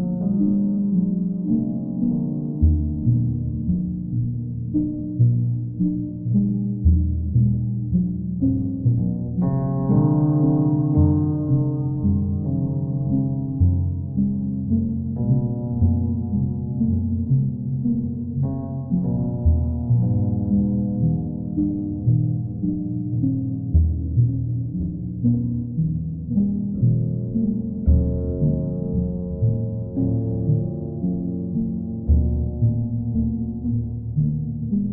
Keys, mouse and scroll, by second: 1.9 click, 6.5 click, 8.5 click, 9.2 click, 10.3 click, 13.1 click, 13.5 shift+click, 16.8 z, 18.3 click, 19.7 click, 20.0 shift+click, 22.2 click, 24.9 right click, 26.1 click, 31.7 click, 32.7 click, 34.6 click.